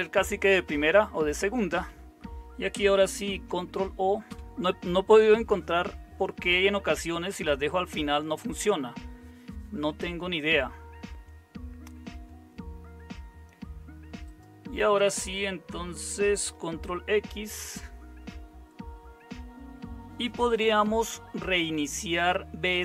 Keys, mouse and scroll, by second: 0.9 Down, 1.1 Up, 1.7 Up, 3.1 Down, 17.5 ctrl+x.